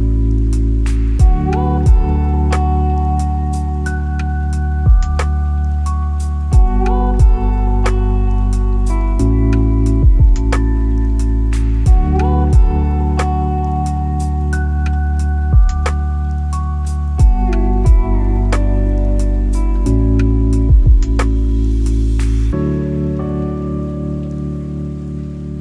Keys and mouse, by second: 0.9 middle click, 1.5 s, 4.5 r, 4.7 y, 8.2 g, 8.4 y, 14.1-14.5 shift+middle drag, 15.8 middle click, 15.8 t, 17.9 click, 20.2-21.9 drag, 22.4-23.4 drag.